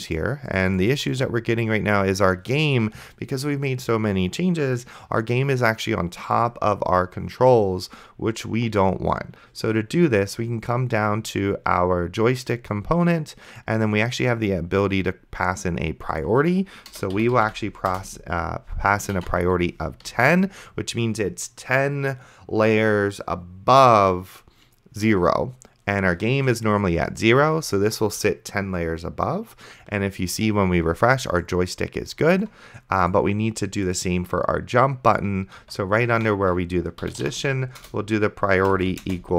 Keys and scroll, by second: 16.9-17.9 typing, 17.9 Return, 18.9-19.9 typing, 20.4 ctrl+s, 35.9 Tab, 36.8-39.3 typing.